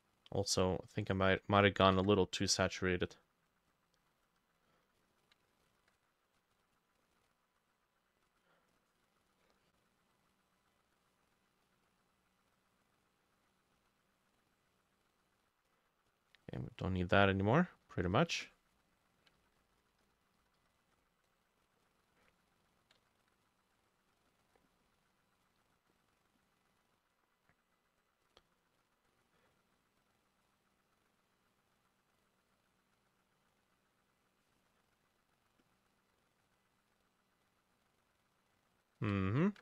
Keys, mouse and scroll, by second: 1.9 ctrl+u, 5.7 ctrl+click, 8.8 double click, 10.3-16.9 drag, 18.3-22.8 drag, 18.3 e, 19.3-21.2 ctrl+middle drag, 19.4 ctrl+z, 19.6 ctrl+z, 20.1 ctrl+z, 20.4 ctrl+z, 20.6 ctrl+z, 23.2 ctrl+z, 23.2-25.1 drag, 23.2-24.7 middle drag, 26.7 double click, 30.5 double click, 32.3 double click, 32.7 double click, 33.1 double click, 35.1 double click, 37.5 double click, 39.4 ctrl+click.